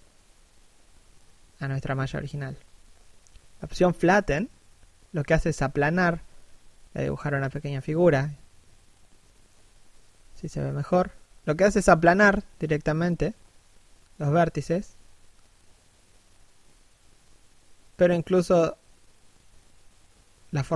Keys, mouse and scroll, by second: 1.7 click, 4.0 f, 4.3 click, 6.3 f, 6.6 click, 8.6 middle click, 10.3 click, 12.2 middle click, 13.3 click, 15.4 middle click, 18.9 middle click, 19.6 1, 19.9-20.7 scroll down 1.